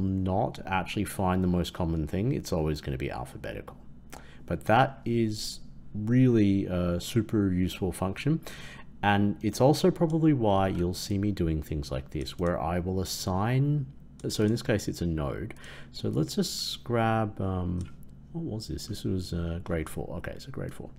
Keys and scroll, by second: 10.6 ctrl+x.